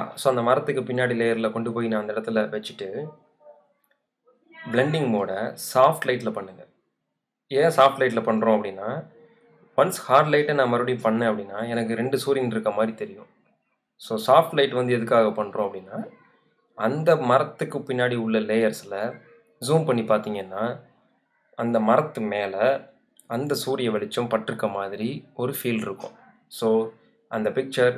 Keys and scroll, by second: 3.9 Return, 22.9 z.